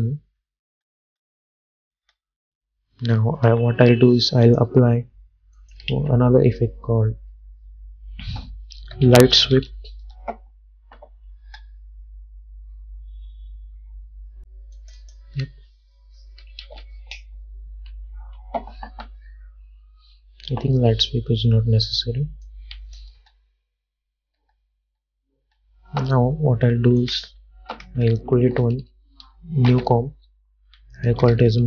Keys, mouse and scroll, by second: 3.6 j, 4.6 click, 6.0 ctrl+a, 8.7-11.6 typing, 14.9 click, 16.7 ctrl+z, 22.6 click, 23.3 space, 27.1 click, 29.8 ctrl+n, 31.1-31.6 typing.